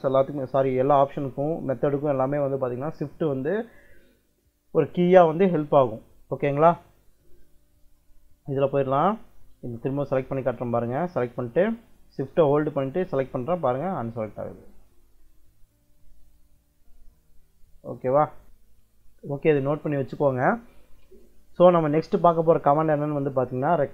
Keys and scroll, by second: 7.5 Escape.